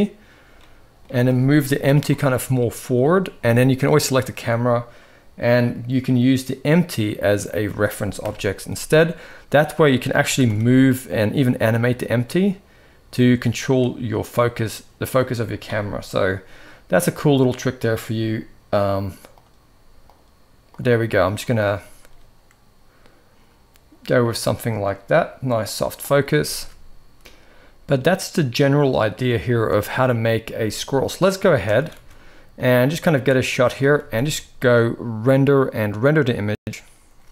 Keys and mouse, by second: 0.4-0.7 middle drag, 1.3 KP_3, 2.0 g, 3.5 click, 5.3 click, 7.9 KP_0, 9.5 click, 9.9 g, 14.2 click, 16.9-20.5 drag, 20.6 click, 20.7 click, 21.0-25.4 drag, 26.1 ctrl+s, 26.3 ctrl+s, 27.2 0, 29.2 shift+click, 30.2 z, 31.3 click, 31.6 ctrl+s, 31.7 ctrl+s, 32.3-33.4 drag, 33.7 ctrl+s, 33.9 ctrl+s, 34.9-37.3 drag.